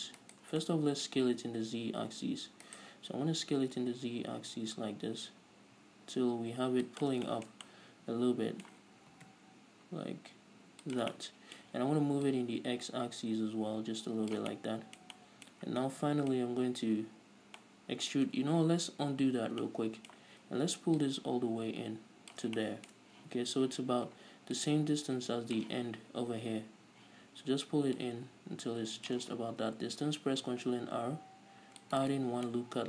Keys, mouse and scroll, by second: 1.0-1.6 shift+right drag, 1.6 middle click, 1.7 s, 3.5-4.5 shift+right drag, 3.8 s, 7.7 shift+click, 7.8-11.4 shift+middle drag, 9.4 s, 11.4 shift+click, 11.6-12.7 middle drag, 12.7-15.0 drag, 15.0-21.5 middle drag, 16.0 scroll up 2, 19.1 ctrl+z, 21.5-23.0 drag, 23.0-25.0 shift+middle drag, 25.0-32.8 drag, 30.1 ctrl+r, 32.8 right click.